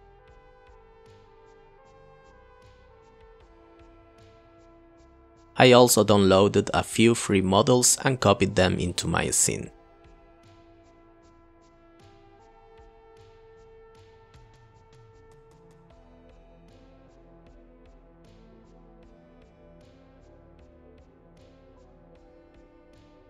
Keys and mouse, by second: 0.1 click, 1.5 click, 2.1 click, 2.7 click, 2.9 click, 3.2 click, 3.7 click, 3.9 Delete, 4.3 click, 8.5 ctrl+v, 8.9 g, 9.9 g, 10.2 click, 10.6 g, 12.1 g, 14.4 s, 14.8 g, 15.0 r, 15.6 middle click, 15.8 click, 16.0 g, 16.7 click, 20.2 click, 20.3 ctrl+v, 20.4 g, 21.1 click, 21.3 g, 21.5 g, 22.5 g.